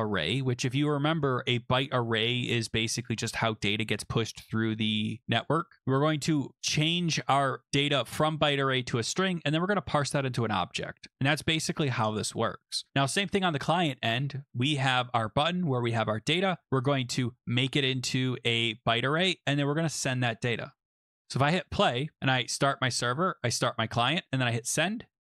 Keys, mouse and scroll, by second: 7.5 click, 7.7 click, 13.1 click, 13.7 middle click, 14.3 middle click, 14.6 middle click, 16.6 click, 17.1 click, 18.8 click, 18.9 click, 20.4 click, 20.6 click, 21.3 click, 22.5 click, 23.5 click, 24.7 click.